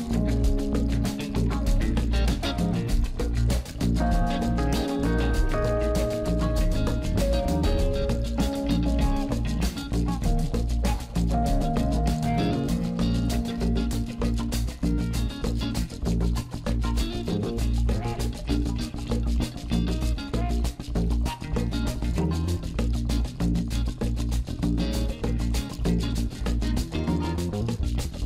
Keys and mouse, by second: 2.8 click, 4.6-6.0 middle drag, 14.4-16.0 drag, 18.3-21.9 middle drag, 22.1 Tab, 23.2 click, 24.2 middle click, 26.7 Tab, 27.3 Tab.